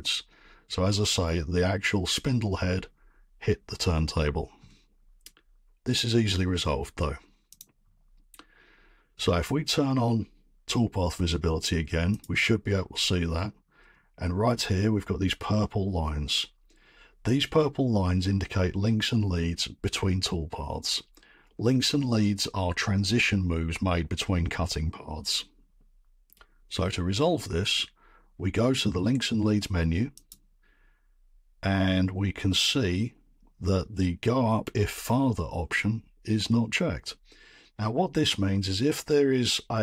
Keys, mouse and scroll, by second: 7.6 click, 12.2 click, 13.1 middle click, 13.8-14.1 scroll, 30.3-35.4 drag.